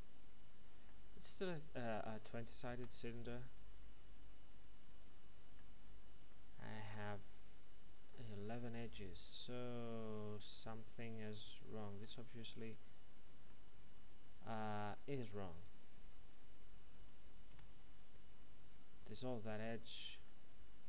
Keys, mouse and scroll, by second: 1.3 right click, 2.1 ctrl+right click, 3.0 middle click, 12.4-13.4 scroll up 1, 13.4 middle click, 15.5 right click, 17.5 x, 19.0 click, 20.2 middle click.